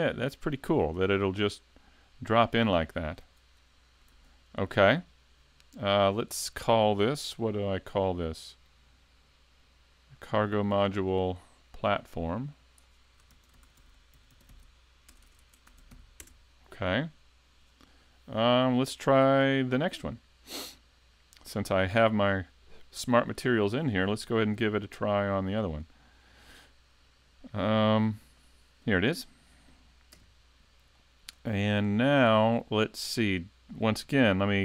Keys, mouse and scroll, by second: 27.0-28.4 scroll down 1, 28.4 click, 28.4-29.5 scroll down 1, 29.5 right click, 30.1 KP_Decimal, 31.0 shift+middle click, 31.5-31.8 scroll down 2, 31.9 middle click.